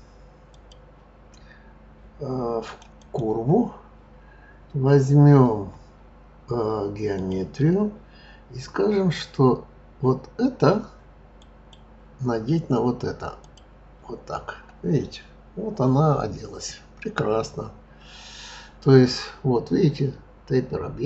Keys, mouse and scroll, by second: 0.5-2.8 drag, 3.0 click, 7.1 click, 11.3 click.